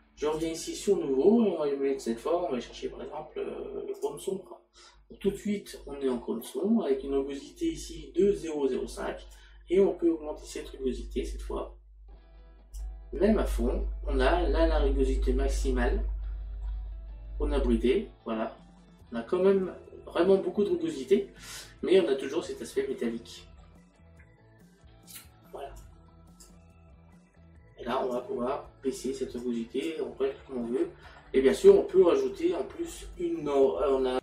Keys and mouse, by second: 0.4 click, 4.0 click, 9.4 click, 15.9 middle click, 22.1 middle click, 25.8 click, 28.2 click, 29.4 click.